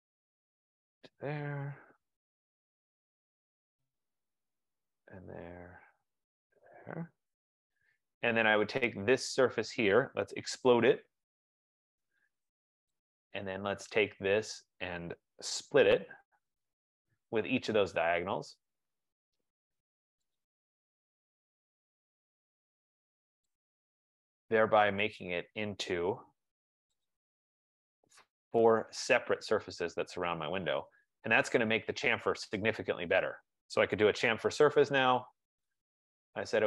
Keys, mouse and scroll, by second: 1.1 click, 1.8 Return, 2.4-3.3 scroll, 3.3-4.2 scroll, 4.2 right click, 5.1 click, 6.6 click, 7.5 Return, 8.9 click, 10.0-12.6 typing, 13.1 click, 14.4 click, 15.7-17.8 typing, 18.4 click, 20.5 click, 21.7-22.4 scroll, 22.8-23.3 scroll, 23.6 click, 25.3 click, 26.2 Return, 27.3 click, 28.9 click, 29.8 click, 31.5 right click, 32.1 scroll, 32.2 scroll down 2, 33.1 scroll down 3, 33.8-35.1 typing, 35.4-36.4 scroll.